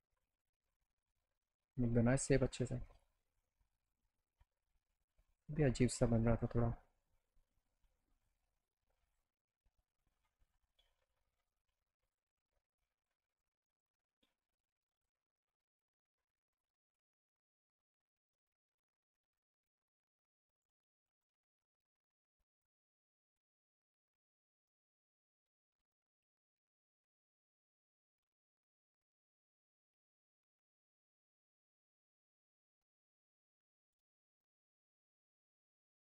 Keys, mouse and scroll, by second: 0.4 click, 1.0 click, 1.5 middle click, 2.0 alt+middle click, 2.9 click, 3.5 middle click, 5.3 click, 6.9-8.3 drag, 9.1 click, 10.2-11.5 drag, 12.1 click, 13.1-14.3 drag, 15.0 click, 15.8-16.9 drag, 17.4-20.6 shift+drag, 22.1 click, 22.6 click, 24.7 alt+click, 26.7 alt+middle click, 28.8 click, 30.0 ctrl+click, 31.1 click, 32.1 click, 33.4 ctrl+click, 34.4 click, 35.6 e.